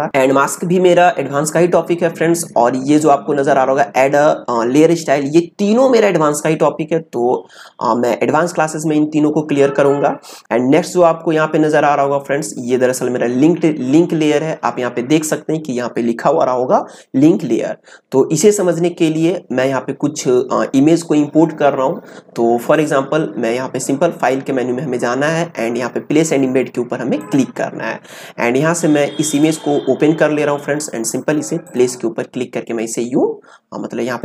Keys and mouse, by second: 22.7 click, 27.1 click, 31.6 click.